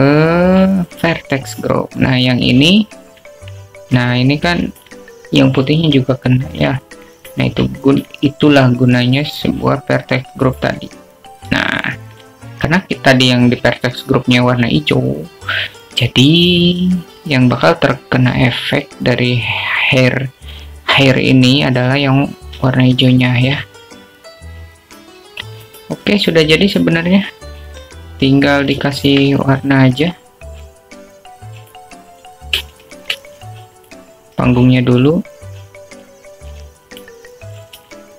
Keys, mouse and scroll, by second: 3.0 click, 6.2 middle click, 6.4-6.9 alt+drag, 6.9 middle drag, 9.0-9.4 middle drag, 9.9 alt+click, 10.1 middle click, 11.2-13.2 drag, 13.8-14.3 alt+drag, 14.3 middle click, 25.2 middle click, 25.8-27.1 alt+drag, 28.8 click, 30.6 click, 31.0 alt+shift+middle drag, 31.8-34.5 drag, 34.9 shift+a, 36.4 s.